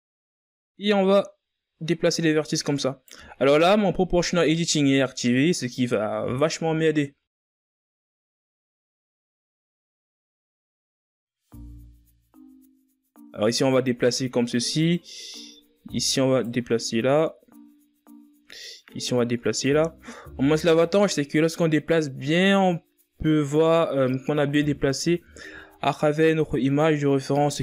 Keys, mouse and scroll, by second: 1.3-2.0 shift+scroll up 4, 2.3 right click, 5.1 ctrl+z, 8.0-9.1 ctrl+scroll up 1, 9.1-9.9 scroll up 2, 9.9-10.7 scroll down 1, 10.7 g, 16.5 right click, 18.8 right click, 21.2 right click, 23.9 right click, 26.5-27.0 ctrl+scroll up 2, 27.0 shift+scroll down 2.